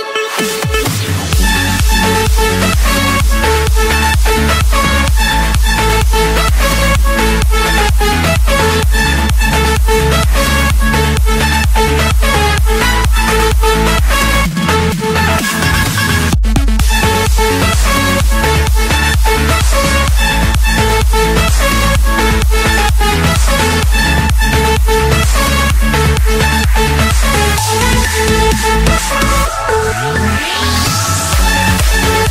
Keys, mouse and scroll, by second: 0.3 middle click, 0.3 middle click, 0.4 middle click, 0.9 middle click, 1.2 middle click, 3.9 click, 4.9 middle click, 5.0 middle click, 5.1 middle click, 5.2 middle click, 5.8 middle click, 7.8-8.7 typing, 9.9 Return, 13.3-13.7 typing, 14.5 Return, 15.5 Escape, 16.7 click, 18.3 click, 18.5-19.0 scroll, 19.0 Escape, 19.8 click, 21.0 Escape, 23.0 typing, 23.6 Return.